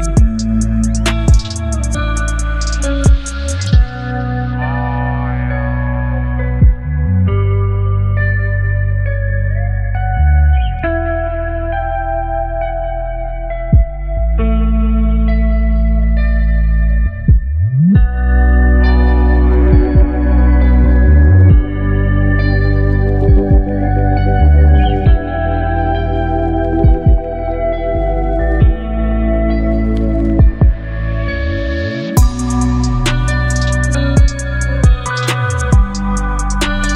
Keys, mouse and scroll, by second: 0.3 v, 0.6 ctrl+t, 3.6-5.9 alt+drag, 13.7 click, 13.8-18.8 alt+drag, 20.2 shift+l, 22.3 click, 24.3-28.0 alt+drag, 29.9 shift+o, 32.1 click, 34.0-36.9 alt+drag.